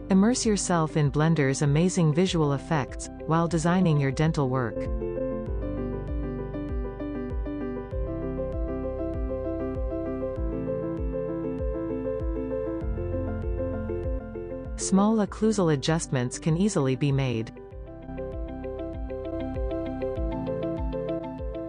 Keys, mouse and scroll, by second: 0.4 click, 0.9 click, 1.3 click, 2.1 click, 2.7-3.0 drag, 3.2-5.4 middle drag, 5.4 click, 6.5 scroll down 1, 8.1 click, 9.0 scroll up 2, 10.6 click, 11.5-11.8 scroll down 2, 11.8-13.0 middle drag, 13.0 scroll up 1, 14.8 click, 15.5 middle click, 16.1 scroll down 1, 16.9-17.9 drag, 18.2-19.0 middle drag, 18.4-18.8 scroll up 5, 21.4 click.